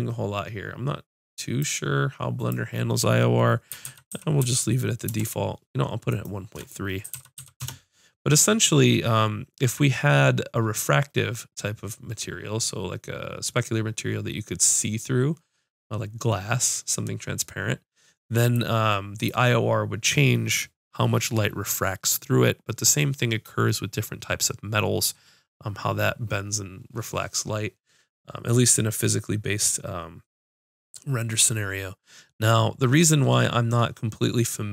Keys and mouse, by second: 2.4-4.5 drag, 4.5 middle click, 6.1-8.0 drag, 8.0-18.6 middle drag, 18.6-30.4 drag, 30.4 middle click.